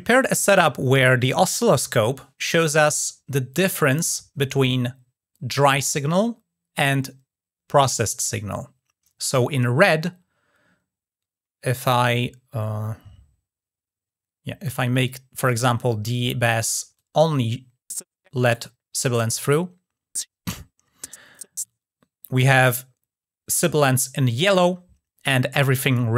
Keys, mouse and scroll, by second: 11.5 click, 14.8 click, 16.8 drag.